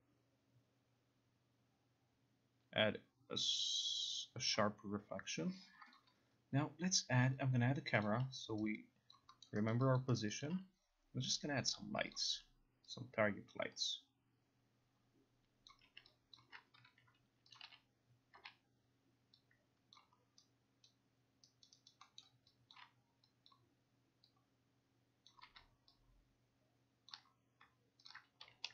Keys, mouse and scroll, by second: 4.6 click, 6.0 click, 8.1 click, 8.7 alt+right click, 9.2 alt+click, 9.2 alt+right click, 9.5 alt+middle click, 9.8 alt+right click, 10.1 alt+click, 10.4 alt+click, 12.2 click, 13.6 alt+click, 15.8 alt+click, 16.4 alt+click, 17.6 click, 17.7-18.9 typing, 20.0 click, 21.0 alt+right click, 21.7 alt+right click, 22.0 alt+right click, 22.3 alt+middle click, 22.3 alt+right click, 22.9 alt+click, 22.9 alt+middle click, 23.6 click, 25.4 click, 26.2 click, 27.2 ctrl+click, 28.2 ctrl+click, 28.5 r.